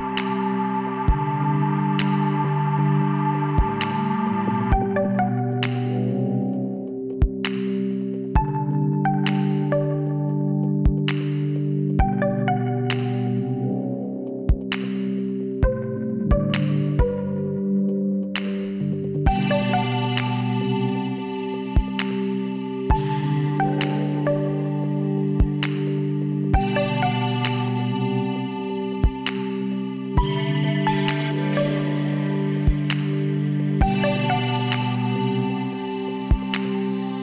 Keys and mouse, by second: 2.4-3.5 middle drag, 3.6-6.4 drag, 3.8 z, 4.5 z, 5.6 z, 6.4 x, 6.8-8.4 drag, 10.0 KP_1, 11.1-12.1 middle drag, 12.1 a, 13.5 shift+l, 16.9 shift+l, 18.1 h, 20.4 ctrl+z, 22.6 shift+l, 25.0 shift+l, 26.2 h, 27.0 middle click, 27.5 KP_1, 30.3-33.0 middle drag, 35.2 click, 35.9 a, 36.1 a, 37.1 g.